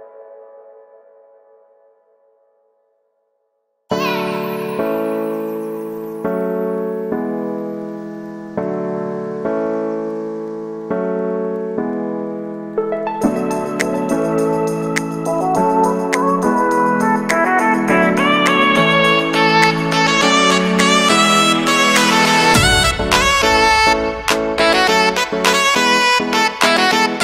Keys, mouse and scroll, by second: 0.0 ctrl+space, 0.2-0.7 scroll down 1, 1.8 ctrl+space, 2.1-2.6 scroll up 1, 2.6 KP_1, 2.9 KP_3, 3.7 alt+right click, 4.1-4.5 scroll up 2, 4.5-8.9 alt+right drag, 8.9-12.7 drag, 12.7-14.7 middle drag, 14.7 KP_1, 15.5 shift+middle click, 15.9-17.4 alt+right drag, 17.4-17.7 scroll up 1, 17.7-21.1 alt+right drag, 21.1-22.6 drag, 22.6-24.1 alt+right drag, 25.0 shift+middle click, 25.6-27.2 alt+right drag.